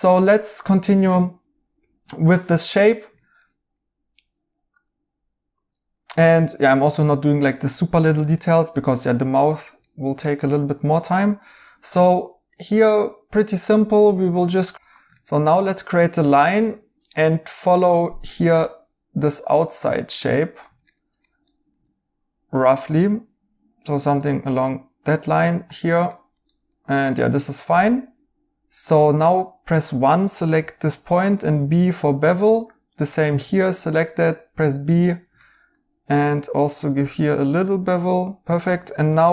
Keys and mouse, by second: 2.2 right click, 8.1 right click, 14.7 Escape, 15.1 right click, 16.5 a, 20.8 right click, 24.5 right click, 26.0 right click, 28.9 1, 30.5 b, 33.3 b, 36.9 b.